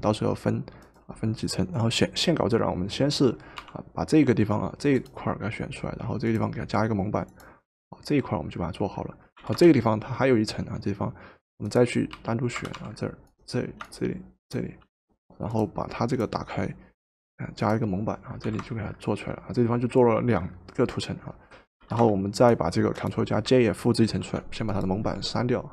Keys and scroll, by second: 3.6 w, 9.5 v, 12.3 w, 12.8 w, 18.5 v, 21.9 v, 24.1 ctrl+j.